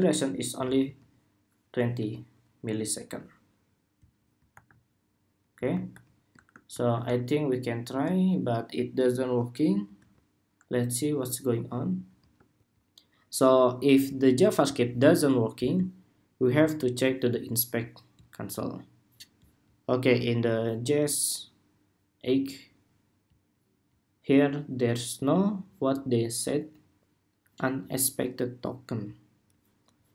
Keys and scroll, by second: 0.5 super+s, 4.2 super+r, 5.6 super+r, 6.6 shift+super+r, 7.7 shift+super+r, 9.7 super+Tab, 12.3 shift+super+2.